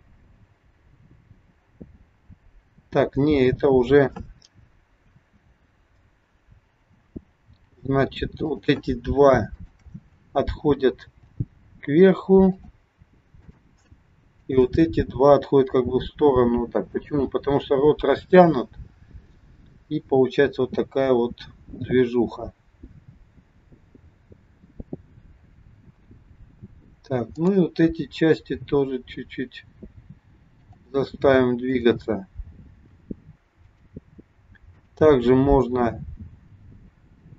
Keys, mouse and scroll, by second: 5.2 ctrl+z, 8.4 click, 9.5 shift+click, 11.0 g, 13.4 click, 14.5 shift+click, 15.8 g, 27.3 click, 28.5 g, 31.7 click, 32.8 g, 34.7 click, 35.8 g.